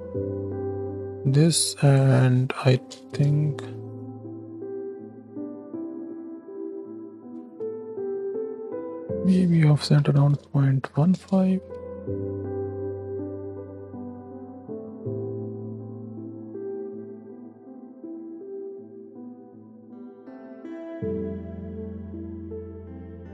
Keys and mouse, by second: 1.7-3.0 drag, 4.0 middle click, 4.9 shift+Down, 5.2 shift+Left, 6.1-6.6 drag, 7.1 click, 9.1-11.2 drag, 11.6 shift+Left, 14.6-15.2 drag, 16.2 click, 17.3 shift+Left, 18.5 click, 20.0-20.9 drag, 21.2 click, 22.9 click.